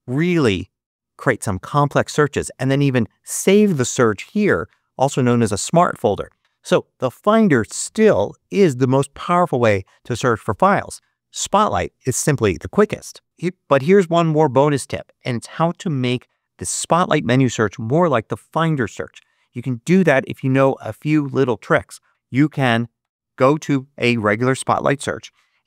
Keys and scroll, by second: 22.9 super+2.